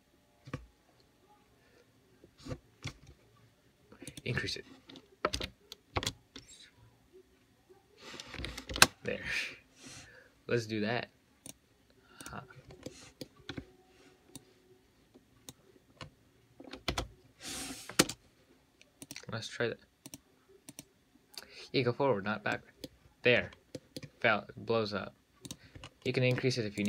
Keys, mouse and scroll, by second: 4.3-7.3 drag, 11.7 click, 12.5 click, 12.9 scroll up 2, 13.1-13.7 middle drag, 13.7 `, 14.6 click, 16.3-17.1 scroll up 2, 17.1 space, 19.3 click, 20.9-22.3 drag, 22.8-23.1 middle drag, 23.1-24.0 scroll down 14, 24.0-25.7 middle drag, 25.7 click, 26.0-26.4 scroll up 3, 26.4-26.8 middle drag.